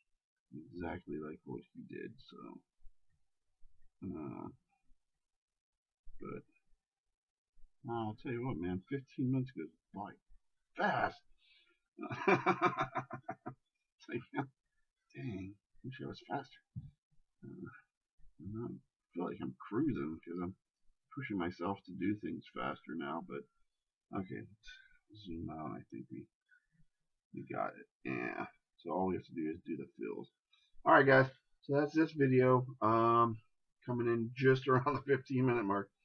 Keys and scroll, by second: 11.2 shift+space, 25.6 ctrl+KP_Subtract.